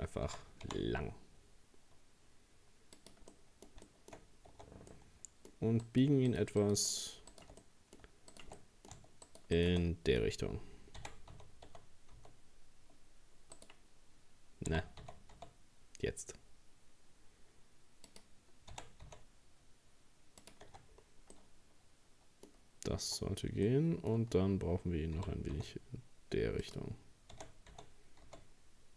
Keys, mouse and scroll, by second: 0.3 s, 3.3 middle click, 4.3 scroll up 1, 4.5 Tab, 4.9 middle click, 5.9 right click, 6.3 shift+right click, 6.6 shift+right click, 6.9 shift+right click, 7.3 shift+right click, 7.6 middle click, 8.3 shift+right click, 8.6 middle click, 9.3 shift+right click, 9.6 shift+right click, 9.8-11.0 middle drag, 11.0 r, 14.7 g, 18.7 r, 20.7 Tab, 20.9-21.4 scroll down 4, 21.4-22.6 middle drag, 22.6-23.0 scroll up 2, 23.0 Tab, 23.7-25.2 middle drag, 25.2 g, 27.4 r.